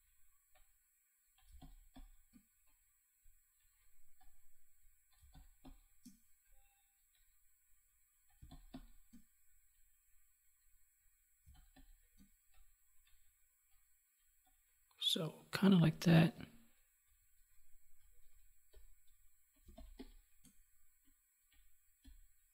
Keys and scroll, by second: 1.4 space, 5.1 space, 8.3 space, 11.4 space, 19.6 space.